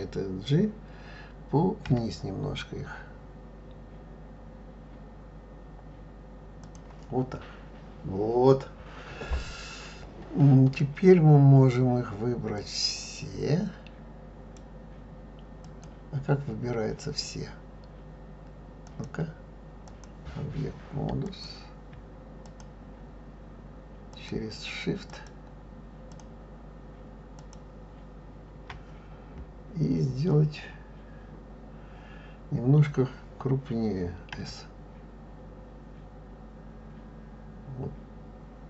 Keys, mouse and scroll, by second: 12.6 click, 15.6 click, 18.9-21.4 drag, 22.5 shift+click, 24.2 shift+click, 25.1 shift+click, 26.1 shift+click, 27.4 shift+click, 34.4 s.